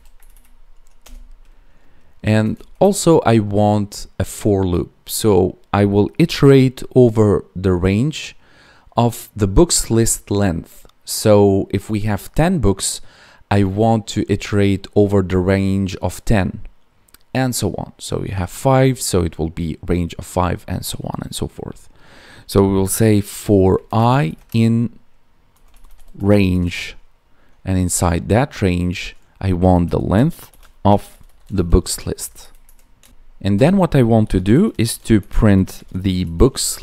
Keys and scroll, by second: 0.1 Right, 2.7 space, 23.9 space, 24.4 space, 32.1 Tab, 32.3 Right, 33.1 ctrl+s, 36.5 Tab.